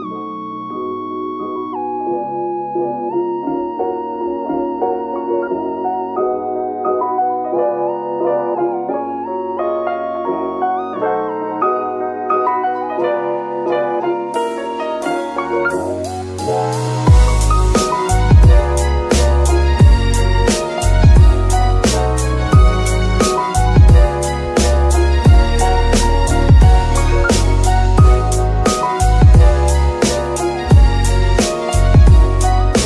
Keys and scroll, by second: 0.5 KP_3, 1.6 g, 1.8 y, 14.6 KP_3, 31.7 g, 32.2 Escape.